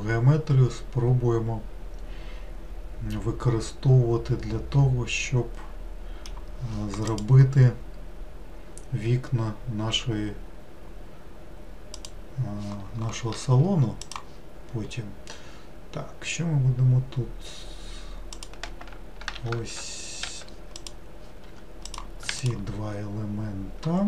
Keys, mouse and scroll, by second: 14.1-17.2 drag, 18.4 click, 19.4 q, 20.8 click, 21.5 w, 21.9 click, 22.5-24.0 shift+drag.